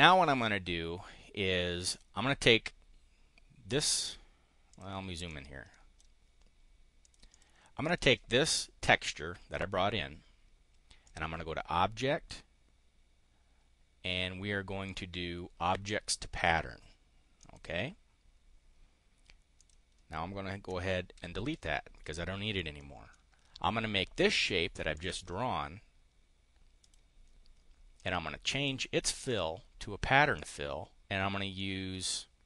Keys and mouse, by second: 4.6 click, 5.2 click, 7.0 click, 7.8 click, 11.0 click, 16.3 click, 17.3 click, 19.4 click, 21.1 Delete, 22.0 click, 22.5 click, 24.9 click, 26.8 click, 27.9 click, 29.2 click, 30.3 click, 31.4 click.